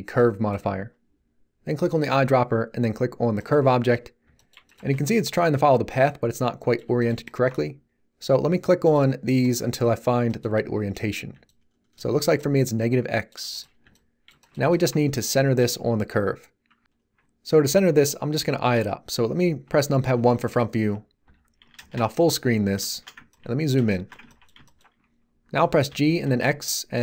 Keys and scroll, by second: 4.9 z, 20.1 1, 21.2 t, 21.8 shift+space, 25.8 g, 26.2 x.